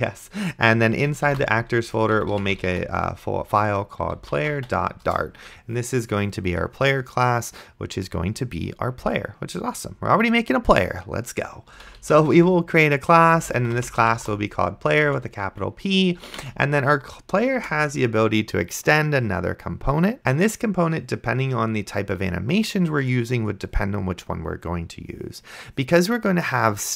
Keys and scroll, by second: 1.9-5.1 typing, 11.6-16.9 typing, 17.6 Return.